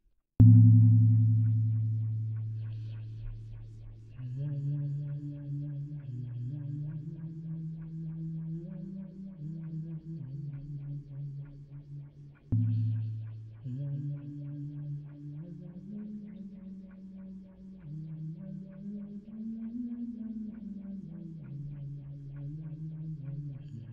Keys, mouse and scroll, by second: 4.3 middle click, 4.3-9.5 d, 7.8-12.5 drag, 10.8 d, 13.4 click, 13.4 d, 16.9 d, 18.0-19.4 middle drag, 20.6 d, 21.3 click.